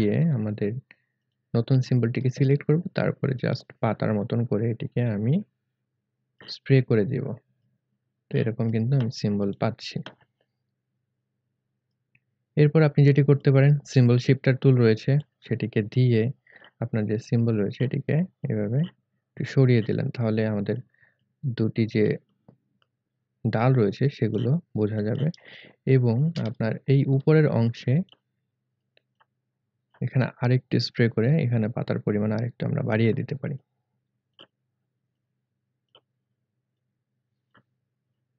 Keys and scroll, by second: 25.6 space, 26.5 alt+space.